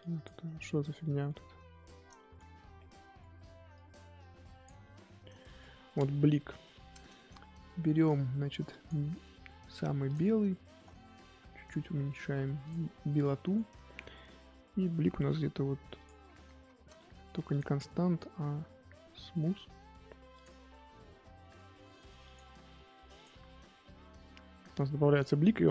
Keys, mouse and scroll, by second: 0.4 scroll up 3, 0.7 scroll down 1, 1.0 middle click, 1.4-2.2 scroll down 7, 2.2 shift+middle click, 2.4 scroll up 2, 2.6 scroll down 1, 2.7 middle click, 3.7-4.8 drag, 4.8-6.3 shift+middle drag, 6.3 KP_1, 8.7-10.5 drag, 10.5-12.6 shift+middle drag, 12.6-13.3 drag, 13.3 shift+middle click, 13.7-15.1 scroll up 1, 15.1-15.8 scroll up 1, 15.9 click, 16.5 ctrl+z, 18.6-20.9 drag, 20.9 f, 23.1 click, 23.6-24.1 scroll down 9, 24.1-25.7 middle drag.